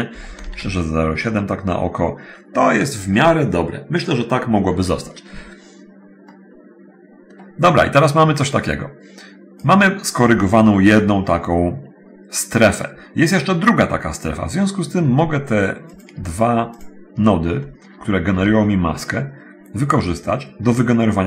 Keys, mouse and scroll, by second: 0.6 Return, 0.6 BackSpace, 0.6 7, 5.7 middle click, 6.5 click, 8.7 click, 16.0 click, 17.0 shift+click, 18.5 g.